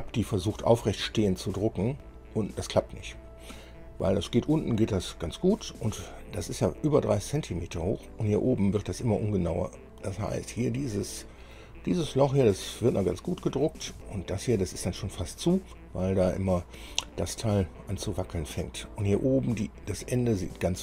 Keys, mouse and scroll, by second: 0.3-1.9 middle drag, 2.1-4.0 drag, 4.4-6.0 drag, 6.3-7.7 drag, 7.8 scroll down 2, 9.7-10.9 drag, 11.0 click, 12.2-12.6 scroll up 2, 12.8-14.0 middle drag, 14.2 shift+middle click.